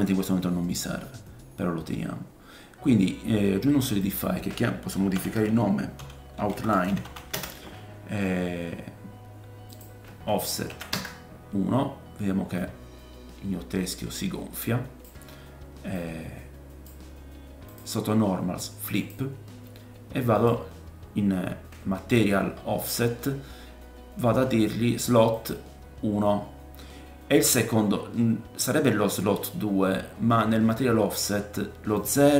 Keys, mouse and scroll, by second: 4.0 click, 9.7 click, 12.6 click, 15.9 click, 17.7 click, 19.1-20.3 drag, 25.3-32.3 drag.